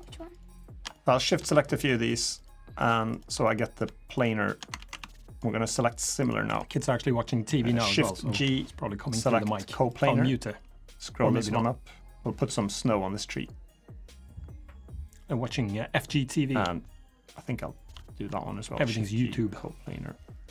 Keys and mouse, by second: 0.5 shift+click, 0.7 middle click, 1.8 shift+click, 2.6 shift+click, 2.9 shift+click, 3.2 middle click, 4.6 ctrl+z, 5.1 shift+click, 6.3 shift+click, 8.1 shift+g, 10.7-16.3 drag, 18.4 shift+g.